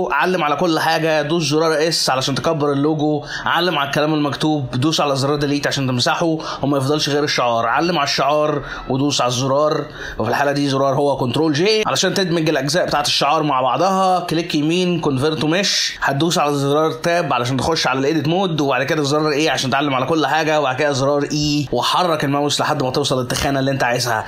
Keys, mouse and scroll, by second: 0.9 s, 3.2 shift+middle click, 3.2 click, 3.2 scroll up 3, 3.4 click, 5.1 Delete, 6.5-7.0 scroll down 5, 7.3 shift+click, 8.8 ctrl+j, 11.6 right click, 13.8 shift+middle click, 13.8 click, 13.8 scroll up 3, 13.8 right click, 15.7 middle click, 17.7 Tab, 19.3 a, 19.9 e, 21.5 middle click, 22.6 Tab, 22.7 Tab, 22.9 middle click, 24.0 Tab.